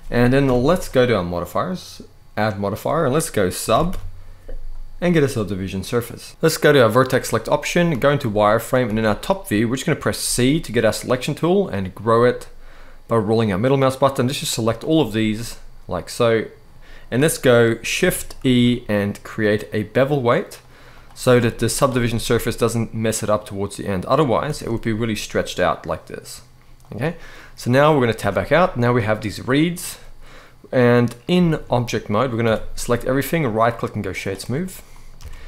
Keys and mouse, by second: 0.1 KP_7, 1.4 click, 2.1-6.0 drag, 6.4 click, 7.6 z, 8.6 alt+a, 9.9 c, 14.5 right click, 15.0-16.3 middle drag, 18.1 shift+e, 21.3 z, 23.1 middle click, 24.2 shift+e, 26.5 click, 27.9 Tab, 28.3 middle click, 29.2 middle click, 31.1 shift+middle drag, 31.7 middle click, 32.1 a, 33.0-33.9 right drag, 34.6 middle click, 34.8 alt+a.